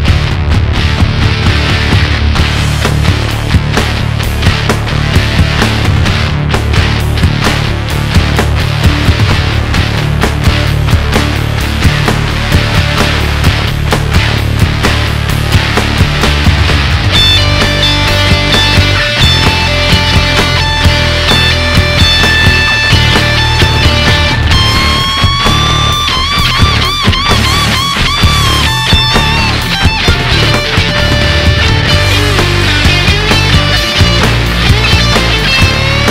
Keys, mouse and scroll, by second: 0.8 Tab, 1.5-3.0 shift+middle drag, 3.0 Tab, 5.4 scroll up 2, 6.6-7.6 drag, 7.6-8.0 scroll up 2, 8.0-9.6 middle drag, 9.6 alt+click, 11.0 alt+shift+click, 11.9 KP_1, 14.6 click, 15.5-16.0 scroll down 2, 16.0 Tab, 16.5 scroll down 1, 16.8-18.5 middle drag, 18.5 KP_1, 19.2-20.6 shift+middle drag, 20.6 scroll up 2, 20.8-21.6 middle drag, 21.6 Tab, 21.8 scroll up 1, 22.0-23.8 shift+middle drag, 23.8 click, 24.3-25.5 middle drag, 25.5 ctrl+shift+click, 26.4 middle click, 27.1 scroll up 1, 27.2-30.1 middle drag.